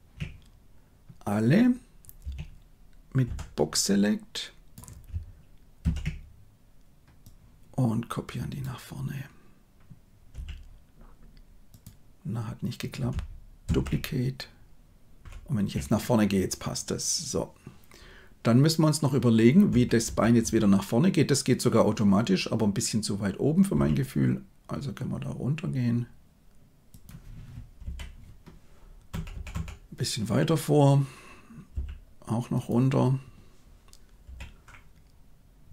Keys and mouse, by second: 3.1 b, 5.7 shift+d, 13.6 shift+d, 15.2 shift+Left, 19.6 Right, 20.0 Right, 20.3 Right, 23.6 g, 29.0 Right, 29.2 Right, 29.4 Right, 31.6 g, 34.1 i.